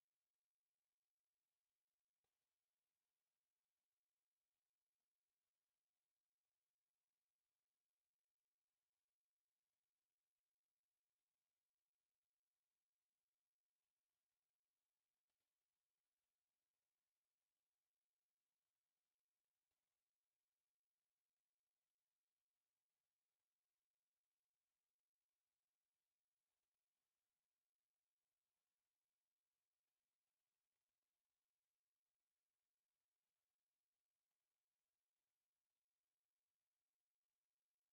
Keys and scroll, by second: 4.1 Escape, 5.6 Escape, 8.6 h, 8.9 space, 9.5 Escape, 9.7 space, 10.3 Escape, 11.0 space, 12.4 Escape, 12.5 space, 13.5 m, 14.0 Escape, 14.2 e, 14.3 space, 14.6 Escape, 15.2 m, 16.2 space, 18.4 Escape, 21.0 Escape, 22.5 p, 23.3 Escape, 23.6 m, 23.9 space, 24.3 Escape, 27.4 Escape, 29.6 Escape, 31.4 s, 31.6 space, 32.2 F8, 32.6 Escape, 32.8 t, 32.9 space, 33.4 Escape, 34.9 o, 35.1 o, 36.1 Escape.